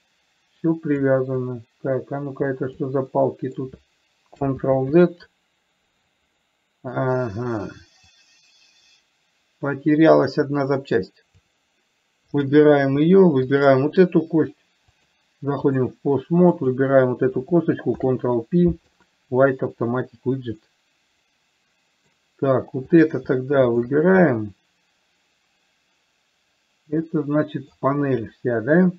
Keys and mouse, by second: 0.0-1.4 drag, 1.7-3.2 drag, 3.5 middle click, 5.0 ctrl+z, 6.7 middle click, 8.4-12.0 drag, 12.6 click, 13.7 shift+click, 15.2 click, 16.9 click, 18.2 ctrl+p, 21.0-22.5 middle drag, 24.7-28.1 middle drag.